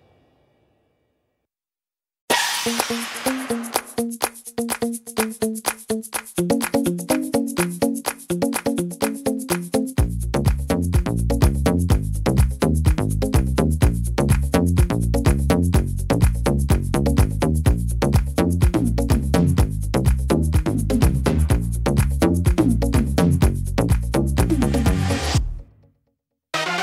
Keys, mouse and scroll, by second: 0.0 middle click, 1.1 click, 3.1 click, 4.0 middle click, 5.4 right click, 6.0 e, 8.0 click, 10.3 click, 12.7 click, 14.0 middle click, 14.5 scroll up 1, 15.3 right click, 16.7 click, 17.7 middle click, 18.8 middle click, 19.5 shift+middle click, 19.7 shift+middle click, 20.0 scroll down 1, 20.3 middle click, 23.2 l, 23.4 l, 24.2 right click, 24.2 l, 24.7 l, 26.2 right click, 26.2 l.